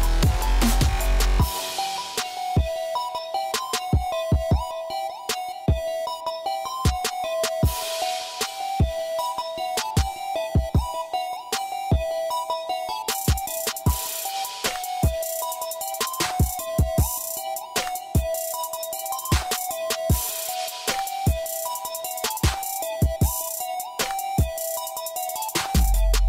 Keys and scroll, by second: 2.3-5.0 typing, 9.7 ctrl+a, 9.9-11.2 typing, 11.5 Return, 13.5 f, 16.4 6, 16.7 Return, 19.3-21.2 typing.